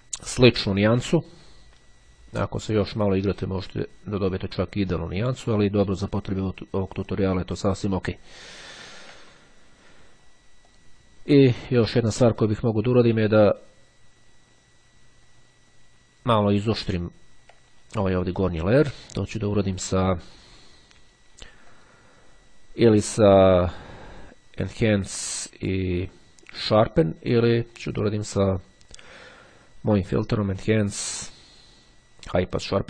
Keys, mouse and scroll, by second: 3.2-6.0 drag, 7.2 click, 8.8-9.4 ctrl+scroll down 2, 10.8 click, 11.9-12.5 ctrl+scroll up 2, 17.2-17.8 ctrl+scroll down 2, 18.6 click, 21.5 click, 32.4 click.